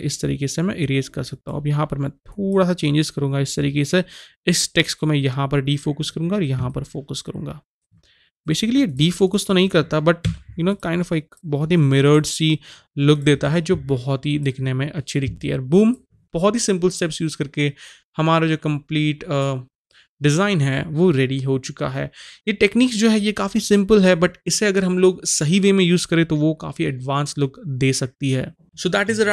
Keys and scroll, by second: 10.3 x.